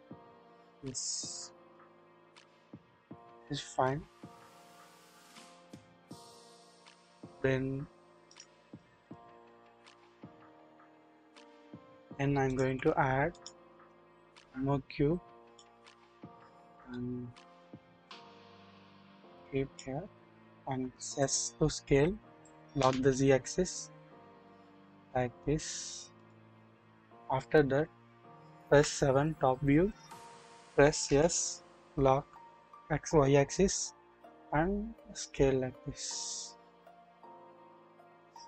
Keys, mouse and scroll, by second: 0.1 scroll down 1, 0.7 shift+middle click, 2.5 middle click, 3.4 scroll down 1, 5.1-6.9 middle drag, 8.4 double click, 10.0-11.4 drag, 11.5-12.4 scroll up 1, 12.6 KP_1, 12.6 1, 13.3 click, 14.2 shift+a, 17.0-19.7 drag, 20.7 scroll, 20.8 s, 22.7 typing, 28.4-29.2 typing, 31.0 typing, 34.1 typing.